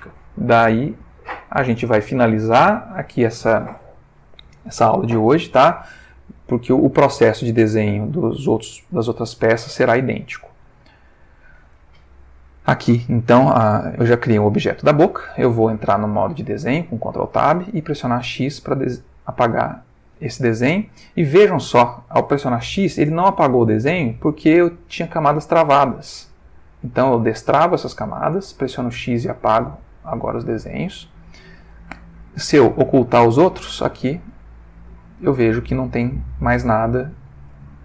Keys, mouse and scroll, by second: 6.1-6.8 shift+middle drag, 7.1-7.7 shift+middle drag, 8.1-8.9 shift+middle drag, 9.3-9.9 ctrl+shift+middle drag, 10.0-11.6 ctrl+shift+middle drag, 16.3 ctrl+Tab, 17.4 click, 18.2 x, 19.1 click, 25.4 click, 26.3-27.1 drag, 28.3 x, 28.8 click, 32.6-34.1 drag, 35.8 ctrl+middle click, 36.8 ctrl+shift+middle click.